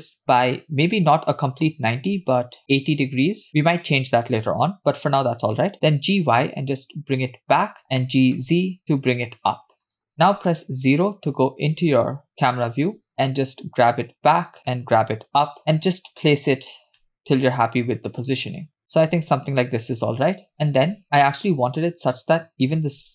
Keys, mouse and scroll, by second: 5.6 g, 8.2 g, 10.6 KP_0, 14.2 g, 15.2 g, 15.6 g, 17.7 g, 22.7-23.1 scroll down 1.